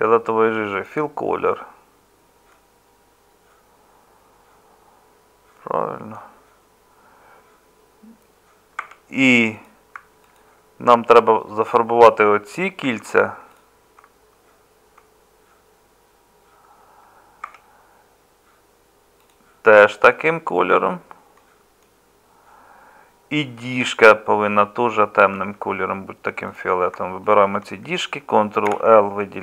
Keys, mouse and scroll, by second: 8.8 Tab, 12.5 middle click, 17.4 Tab, 25.3 Tab, 28.7 ctrl+l.